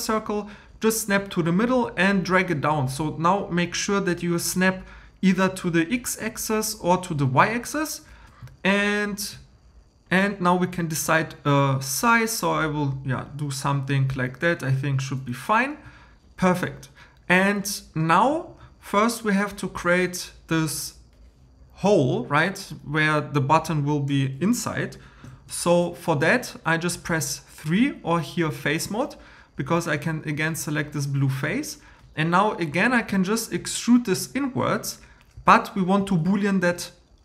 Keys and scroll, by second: 9.8 super+z, 25.3 super+m.